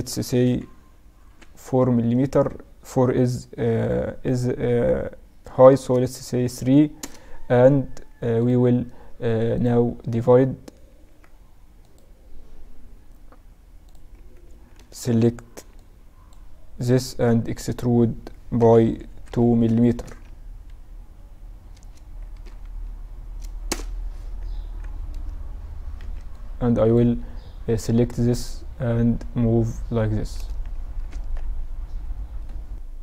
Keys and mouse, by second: 10.9 ctrl+r, 14.5 z, 14.8 a, 15.6 b, 17.3 e, 24.4 z, 24.6 z, 25.1 a, 26.0 b, 27.8-29.7 drag, 30.4 z, 31.1 Tab, 31.9-33.0 middle drag.